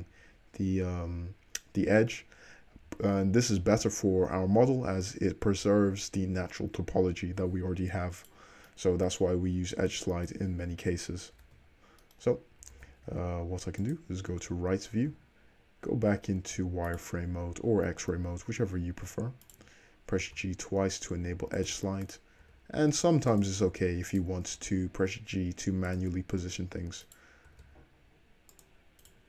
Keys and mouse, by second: 4.8-9.6 middle drag, 10.8 middle click, 10.8 `, 11.6 alt+z, 12.8 alt+z, 13.2 `, 15.1 z, 16.1-18.1 drag, 16.1-16.9 right drag, 17.0 right click, 19.5 shift+click, 20.3 g, 22.1 click, 22.5 g, 24.2 click, 24.6-27.2 middle drag, 24.6 g, 27.2 click, 27.6 g, 29.1 click.